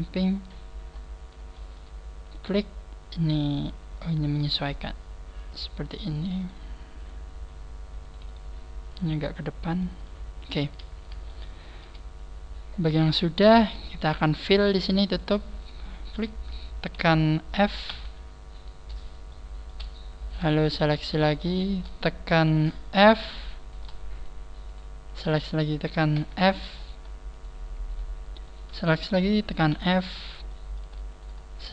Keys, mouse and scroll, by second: 0.0 click, 0.2 scroll down 5, 0.9 scroll up 5, 1.5 shift+middle click, 2.2 right click, 2.5 g, 4.2 right click, 4.4 g, 5.4 click, 6.2 right click, 6.3 g, 8.0 right click, 8.2 g, 9.3 shift+middle click, 10.7 shift+middle click, 10.7 scroll down 2, 11.3 shift+middle click, 12.3-12.7 scroll up 4, 13.0 scroll up 2, 13.8 shift+middle click, 14.6 right click, 15.1 shift+right click, 15.5 shift+right click, 17.9 f, 19.4 shift+middle click, 20.2 right click, 20.7 shift+right click, 21.1 shift+right click, 21.5 shift+right click, 23.0 f, 23.6 right click, 24.2 shift+right click, 24.7 shift+right click, 25.1 shift+right click, 26.2 f, 26.8 shift+right click, 27.3 shift+right click, 27.9 shift+right click, 28.7 shift+right click, 29.7 f, 31.1 right click, 31.5 shift+right click.